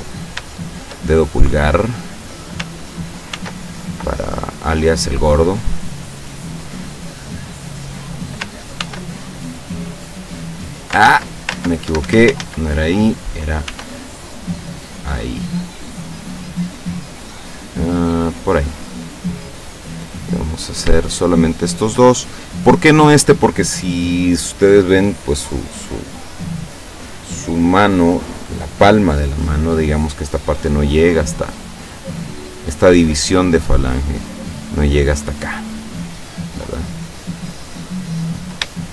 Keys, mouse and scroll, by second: 0.1 right click, 0.6 shift+right click, 3.4 ctrl+r, 5.8 click, 7.9 click, 8.8 ctrl+r, 10.4 click, 11.1 ctrl+z, 11.9 ctrl+Escape, 12.4 ctrl+z, 13.7 ctrl+r, 15.2 click, 18.2 click, 18.9 right click, 20.2 middle click, 21.7 shift+right click, 31.6-34.4 drag, 35.6 middle click, 37.1-38.8 middle drag.